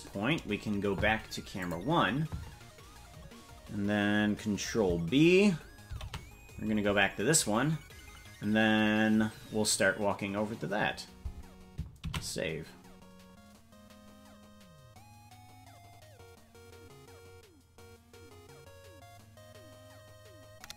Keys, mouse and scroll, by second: 1.6 click, 5.9 ctrl+b, 14.7 ctrl+s.